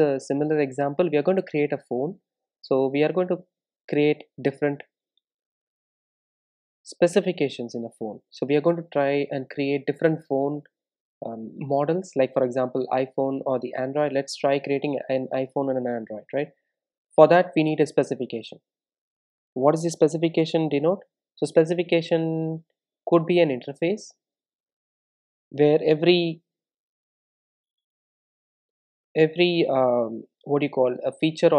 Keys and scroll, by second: 2.5 super+n, 27.6 Return, 27.8 Return.